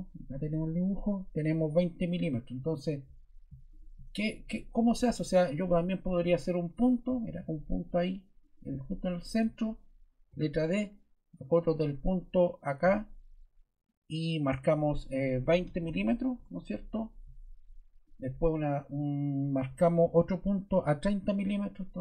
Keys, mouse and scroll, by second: 5.2 ↺, 9.2 ⟲, 10.3 d, 12.6 click, 14.5 click, 15.4-16.3 typing, 17.5 typing, 18.0 click.